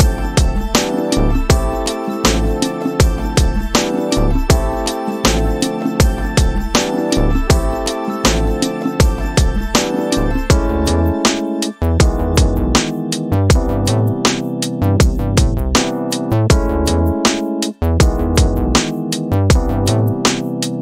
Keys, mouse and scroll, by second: 1.1-4.1 drag, 4.6 scroll down 3, 5.0 middle click, 6.2-7.5 drag, 9.9 middle click, 11.4-20.8 drag.